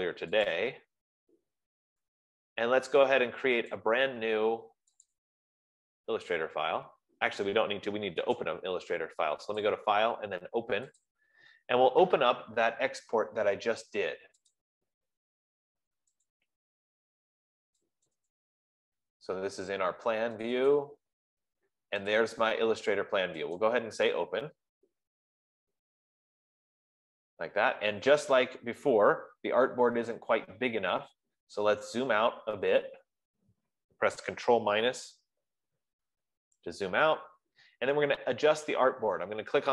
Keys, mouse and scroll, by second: 0.5 F15, 1.0 click, 4.2 click, 5.5 click, 8.8 click, 10.1 click, 11.3 click, 15.0 click, 16.9 click, 18.5 click, 18.9 click, 21.0 click, 21.2 click, 22.7 click, 24.1 click, 31.7 scroll, 32.5-34.0 scroll, 35.2 ctrl+-, 35.7 ctrl+-, 36.4 ctrl+-.